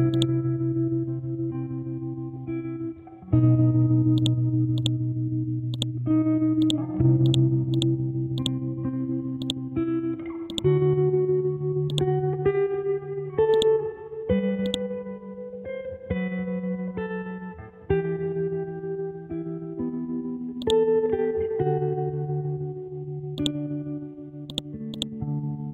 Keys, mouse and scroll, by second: 8.9 scroll up 1, 9.4-16.6 drag, 16.6 Left, 18.2 Right, 18.9 Down, 20.6 ctrl+click, 21.6-22.0 scroll down 1, 22.0-22.6 scroll up 1, 23.4 right click, 24.0-24.5 scroll down 1, 24.5-25.7 drag.